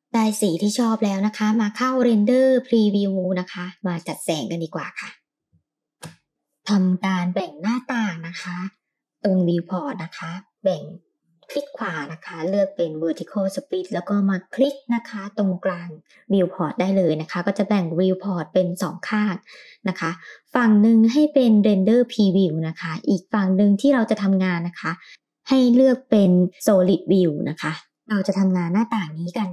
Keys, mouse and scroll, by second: 3.6 click, 4.9 scroll up 2, 6.0 scroll up 1, 6.3 click, 10.1-18.5 right drag, 18.5 z, 23.3-26.1 right drag, 26.7 click.